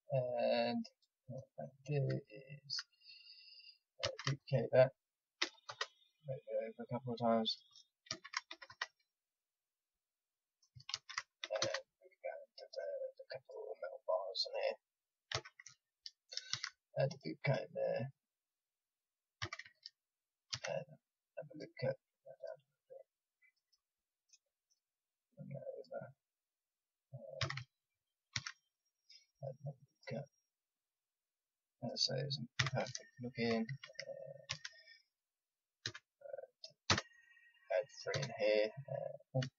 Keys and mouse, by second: 4.0 shift+d, 6.8-8.6 drag, 8.0 shift+d, 9.7-11.6 drag, 10.9 shift+d, 12.4-15.3 drag, 15.3 a, 16.5 ctrl+r, 19.4 a, 20.5 ctrl+r, 23.1 click, 24.1-27.4 drag, 27.4 a, 28.3 ctrl+r, 30.7-33.1 drag, 32.5 a, 33.2-34.4 drag, 34.4 ctrl+r.